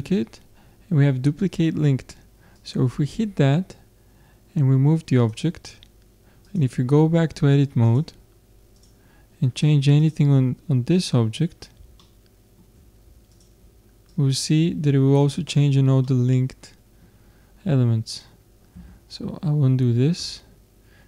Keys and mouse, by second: 2.6-4.4 drag, 6.4-9.7 drag, 8.4-8.9 typing, 9.7 middle click, 10.0-11.8 drag, 11.8-12.9 middle drag, 13.3-15.9 drag, 13.3 middle click, 16.0-17.8 middle drag, 18.9 ctrl+z, 20.2 Tab.